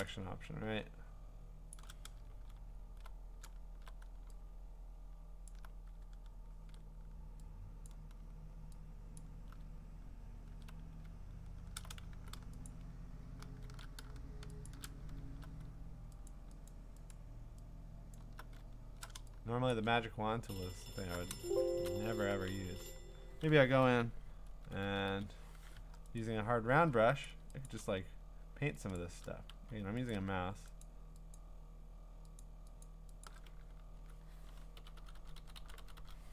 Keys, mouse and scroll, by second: 1.7 shift+click, 2.5 scroll up 7, 3.5 scroll down 3, 3.6-4.0 scroll, 5.5 alt+click, 6.1 alt+click, 6.1 scroll, 7.9 alt+click, 8.5 alt+click, 9.2 alt+click, 9.3-9.7 scroll down 3, 10.0-10.5 scroll down 7, 11.1 scroll up 7, 11.3-12.1 scroll, 12.7 shift+click, 13.6 w, 14.7 shift+click, 16.3 alt+click, 16.7 alt+click, 17.1 shift+click, 17.1 alt+click, 18.2 alt+click, 18.6 scroll down 4, 18.7 scroll, 19.7 click, 21.9 click, 22.4-25.6 typing, 26.2 right click, 27.3 click, 27.7 click, 29.5 x, 30.8 shift+click, 31.4 shift+click, 32.4 shift+click, 32.8 shift+click, 33.2 shift+click.